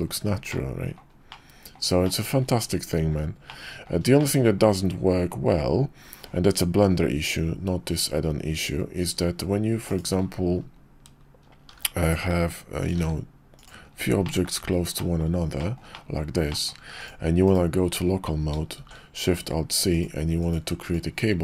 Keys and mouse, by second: 0.5-1.0 middle drag, 1.4-1.7 middle drag, 2.0 shift+middle drag, 3.4-3.9 middle drag, 4.2 shift+middle click, 9.9 click, 11.7 shift+d, 12.2 shift+d, 13.1 shift+d, 14.3 shift+drag, 15.0 drag, 15.6 shift+drag, 15.9 drag, 16.5 shift+drag, 16.9 click, 17.4 /, 18.8 alt+shift+c.